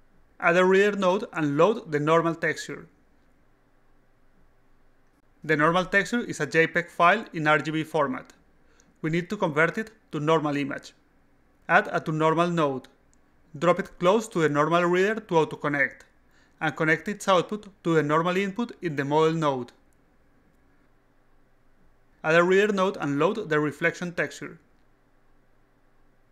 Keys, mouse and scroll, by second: 1.2 click, 1.7-3.0 drag, 3.7 click, 4.5 click, 11.9 click, 12.8-14.3 drag, 16.2-17.7 drag, 19.3 alt+click, 20.4-21.1 alt+right drag, 22.9 click, 23.4-24.6 drag, 25.7 click.